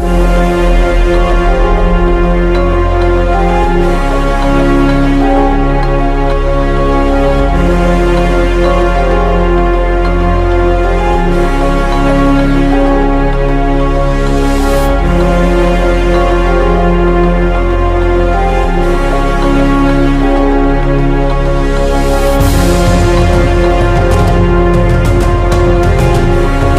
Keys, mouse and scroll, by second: 0.1-10.8 drag, 16.0 click, 18.3 ctrl+scroll up 1, 18.7 scroll down 1, 20.5 scroll up 1, 21.5 click, 26.3 ctrl+scroll up 1.